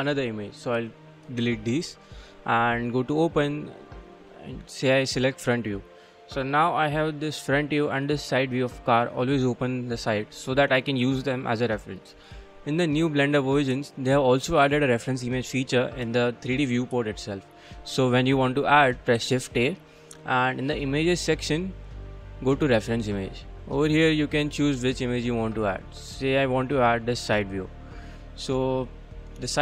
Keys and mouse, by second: 1.3 click, 2.1 click, 6.7 click, 12.5-13.6 middle drag, 19.2 shift+a, 27.6-29.1 middle drag, 29.5-29.6 middle drag.